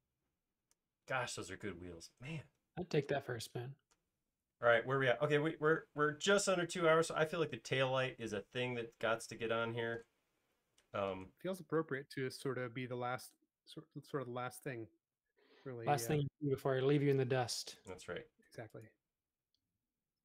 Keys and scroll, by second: 17.2 l.